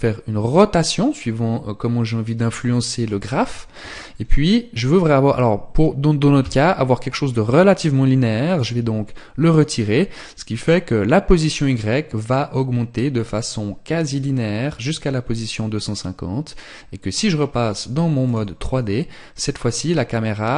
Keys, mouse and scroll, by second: 17.6 click.